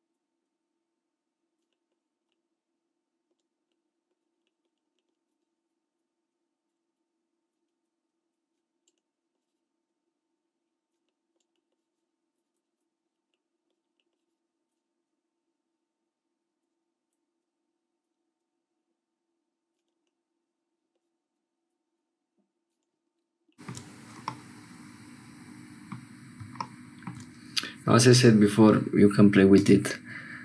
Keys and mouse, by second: 25.0-30.4 drag.